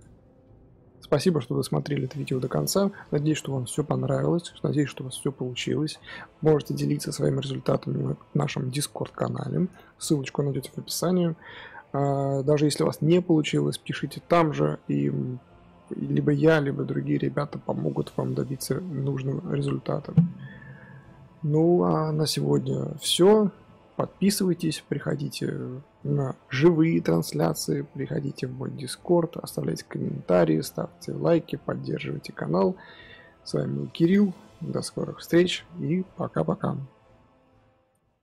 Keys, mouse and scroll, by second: 0.0-38.2 drag.